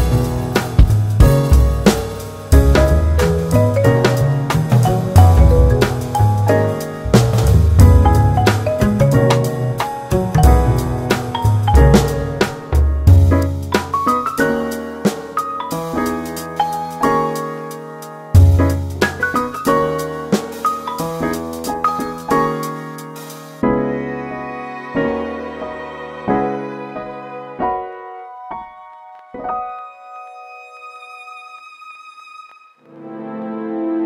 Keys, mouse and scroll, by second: 0.0-0.6 drag, 0.6-1.6 scroll down 3, 1.6 click, 2.0-2.7 scroll up 7, 3.5 click, 4.1-6.7 drag, 6.7 space, 7.0 space, 7.8-11.2 middle drag, 11.2 s, 13.3 ctrl+z, 16.1-19.8 drag, 19.8 space, 20.1 space, 21.7-22.3 drag, 22.3 scroll up 1, 22.9-23.2 scroll down 2, 23.5 click, 25.3 space, 26.8 space, 28.1-28.5 scroll down 1, 28.5-31.6 middle drag, 31.6 click, 32.6 ctrl+a, 33.6 g.